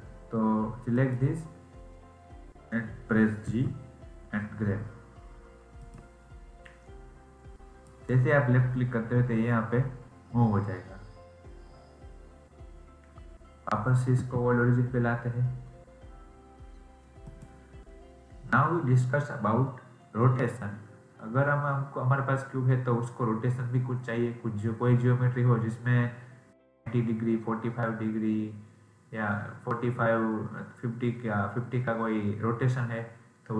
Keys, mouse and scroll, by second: 0.8 click, 7.8 click.